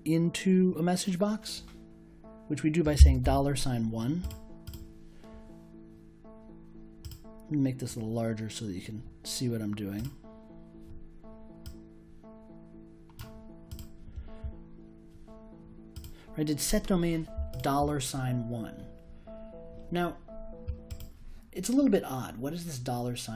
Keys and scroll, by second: 2.9 shift+4, 3.2 1.